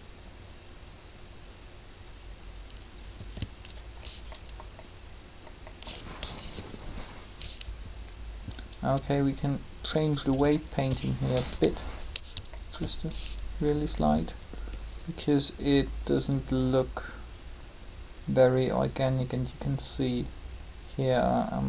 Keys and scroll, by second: 3.1 r, 6.5 3, 11.5 3, 13.9 r.